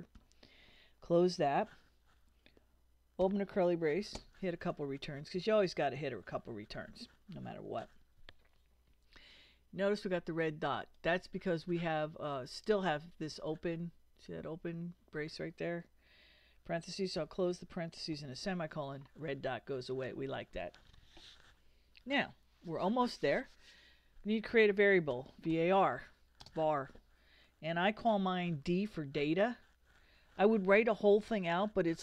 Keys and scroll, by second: 0.2 shift+0, 3.2 shift+[, 4.2 shift+Return, 17.2 shift+0, 18.1 shift+;, 24.9-26.4 typing, 28.6 d.